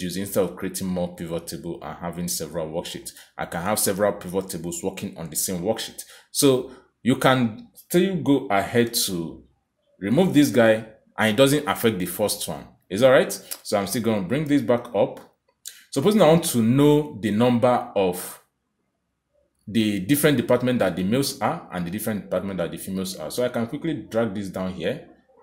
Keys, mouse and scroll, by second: 0.7 click, 2.4 click, 4.2 click, 5.1 click, 9.6 click, 13.7 click, 20.1 click, 22.8 click.